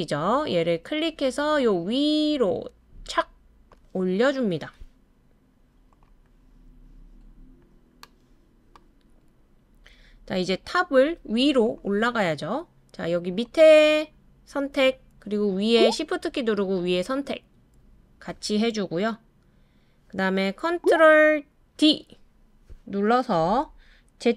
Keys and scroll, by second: 21.7 super+d.